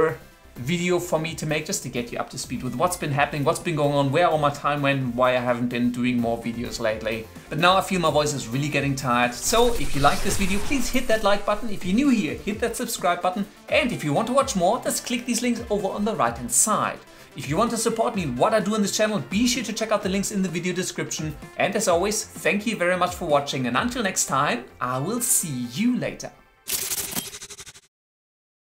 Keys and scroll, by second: 26.7 typing.